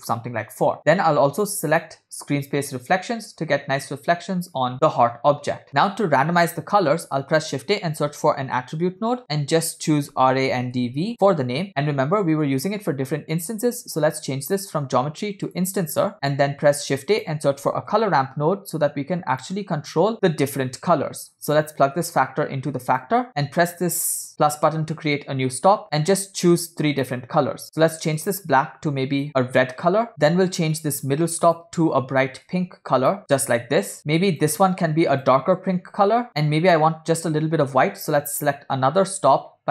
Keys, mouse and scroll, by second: 1.9 click, 5.7 click, 5.7 middle click, 6.9 shift+a, 8.9 r, 9.2-11.2 drag, 11.7-15.8 drag, 16.4 shift+a, 22.3-23.1 drag, 24.4 click, 26.3-27.2 drag, 27.6 drag, 28.3 click, 30.8 click, 31.6 drag, 34.0 click, 35.2 click, 37.2 ctrl+click.